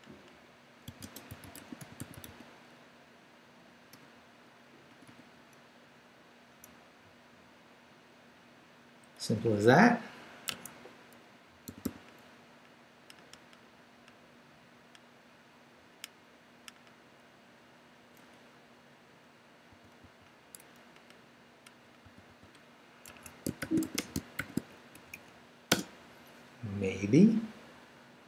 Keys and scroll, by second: 0.6-2.6 typing, 3.9 =, 4.9 ', 6.6 Left, 9.2 Left, 9.4 Up, 10.5 Escape, 11.7 d, 13.3 Down, 15.8 Down, 18.0 Down, 19.7 d, 21.3 Left, 22.0 x, 23.1 Escape, 23.4-24.4 typing, 24.9 shift+Up, 25.7 Return.